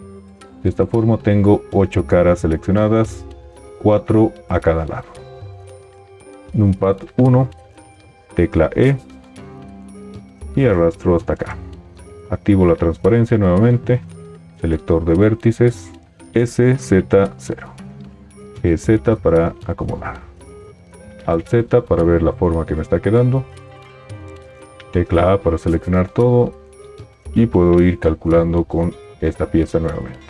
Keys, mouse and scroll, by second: 6.4 KP_1, 8.4 e, 12.2 alt+z, 16.2 s, 18.6 g, 21.1 alt+z, 24.9 a, 27.5 g.